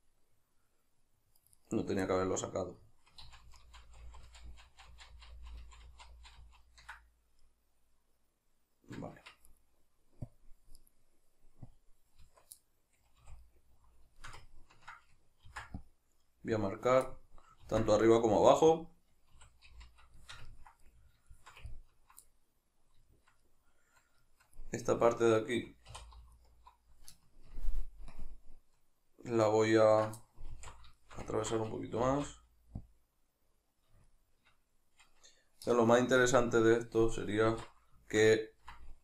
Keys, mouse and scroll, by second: 1.6 right click, 2.1-9.5 middle drag, 3.3 ctrl+z, 9.2 Tab, 9.5 right drag, 10.3 click, 10.8 right click, 11.7 click, 12.2 Tab, 12.6-16.7 middle drag, 13.2 a, 15.5 ctrl+r, 16.7 click, 17.1-18.9 middle drag, 17.6 ctrl+r, 18.9 click, 19.4 a, 20.2-26.3 ctrl+shift+middle drag, 25.9 3, 26.3 alt+right click, 27.5 ctrl+KP_Add, 28.1 ctrl+KP_Subtract, 30.5 alt+q, 30.9-33.0 shift+middle drag, 32.0 g, 33.0 click, 34.1-39.0 shift+middle drag, 36.2 ctrl+KP_Subtract, 37.5 alt+q.